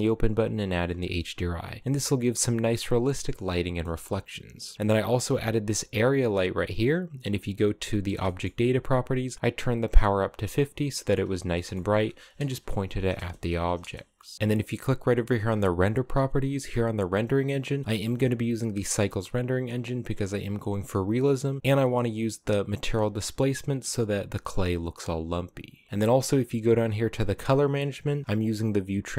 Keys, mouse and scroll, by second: 2.9 scroll down 1, 3.2-3.5 middle drag, 3.5-4.7 scroll down 6, 4.7 right click, 7.3 click, 7.9 shift+middle click, 8.2 scroll up 1, 10.4 middle click, 11.2 scroll up 1, 11.4-13.5 shift+middle drag, 13.5 KP_0, 14.3 click, 16.8-19.7 drag, 21.5 scroll up 2, 21.6-23.8 shift+middle drag, 25.9-26.8 scroll down 14, 26.8-29.1 scroll down 4.